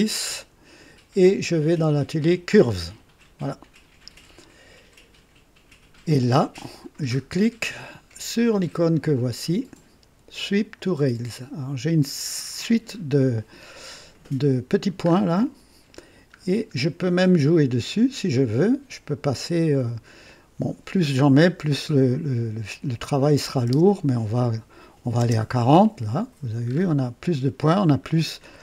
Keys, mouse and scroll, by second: 10.3 click, 15.0-15.4 scroll up 2, 16.0 scroll down 2, 16.7 scroll down 2, 18.3 click, 19.6 click, 23.4 KP_4, 23.6 KP_0, 24.4 click, 25.0 KP_4, 25.2 KP_0, 26.6 scroll up 1, 28.0-28.6 scroll down 2.